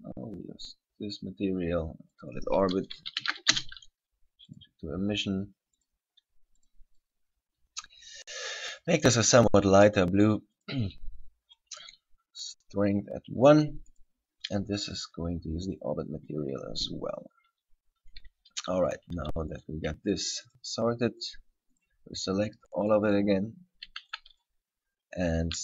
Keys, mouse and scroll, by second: 0.1 click, 2.3 click, 4.7 click, 6.8 click, 14.1 right click, 15.1 click, 17.2 scroll down 2, 17.5-18.9 scroll up 3, 18.9 scroll up 1, 19.7 right click, 20.7 shift+right click, 21.5 shift+right click, 22.0 shift+right click, 23.0 shift+right click, 23.3 shift+right click, 24.2 b, 24.9-25.3 scroll down 4, 25.5 scroll up 1.